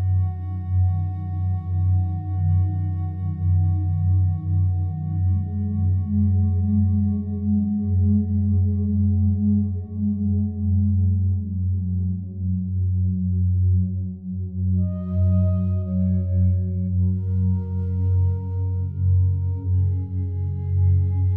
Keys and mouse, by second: 2.6 click, 3.2 click, 4.2-6.2 drag, 6.3 alt+click, 7.4-8.7 drag, 9.0 alt+click, 9.7 click, 10.6 alt+click, 11.4-12.8 drag, 13.1 alt+click, 14.1 alt+click, 14.8 alt+click, 15.9 alt+click, 16.8 alt+click, 18.0 alt+click, 18.7 alt+click, 19.5 alt+click, 20.4 alt+click.